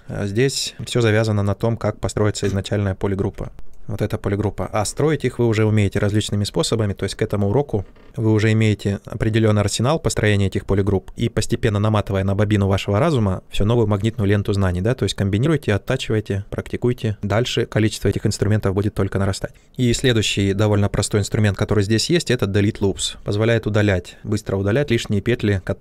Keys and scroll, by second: 3.2 ctrl+z, 3.5 shift+f.